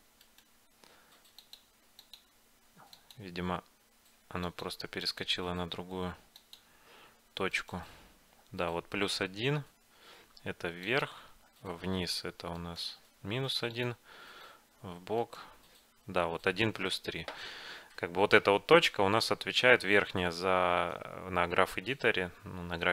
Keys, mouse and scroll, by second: 1.5-9.2 drag, 7.6-9.5 right drag, 10.9-16.9 drag, 12.7-14.6 right drag, 15.3-17.1 right drag, 18.5-20.3 middle drag, 20.4-22.9 middle drag.